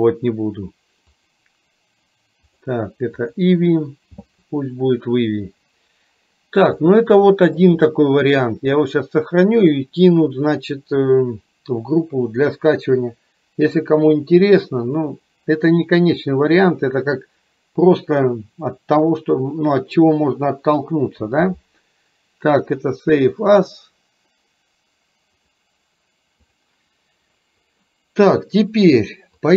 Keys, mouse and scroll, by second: 2.7-3.7 drag, 6.9-7.8 middle drag, 9.5-23.9 drag.